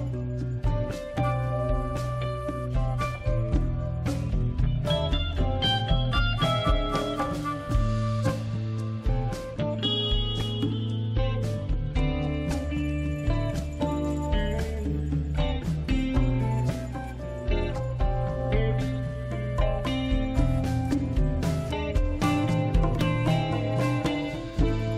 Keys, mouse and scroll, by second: 0.0 click, 3.3 click, 4.8-7.0 scroll down 2, 7.2 click, 10.1-11.3 scroll down 2, 11.5 click, 16.3-17.0 scroll up 1, 18.8 click, 20.1 click, 23.3 click.